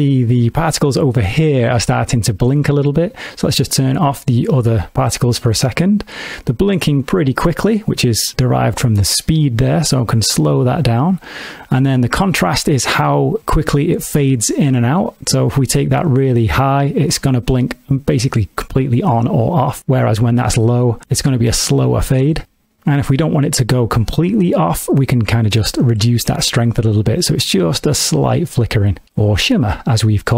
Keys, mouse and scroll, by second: 4.3 click, 9.1 click, 15.3 click, 20.1 click, 25.2 click.